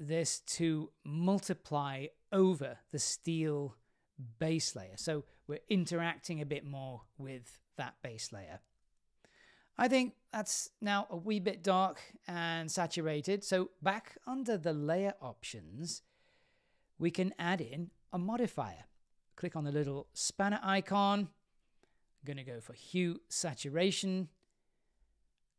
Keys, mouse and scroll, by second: 1.2-3.0 drag, 3.7-4.8 middle drag, 5.1-5.8 scroll down 3, 5.7-6.7 scroll up 6, 6.2-7.6 middle drag.